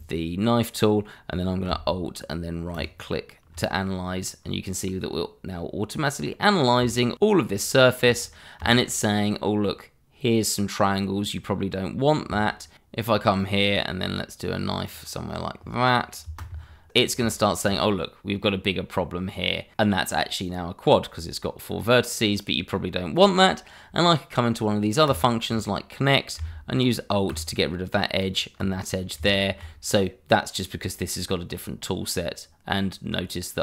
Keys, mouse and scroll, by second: 2.7 alt+right click, 2.9 right click, 4.0-4.4 scroll down 1, 4.4 middle click, 7.0 shift+middle click, 7.7 shift+middle click, 7.7 middle click, 7.8 shift+middle click, 8.1-8.7 scroll up 1, 8.7 shift+middle click, 13.6 right click, 14.8 click, 16.9 space, 17.3 shift+middle click, 18.8 scroll up 1, 19.7 middle click, 25.0 click, 27.2 click, 28.2 click, 28.8 click, 28.8 scroll down 1, 29.3 shift+middle click.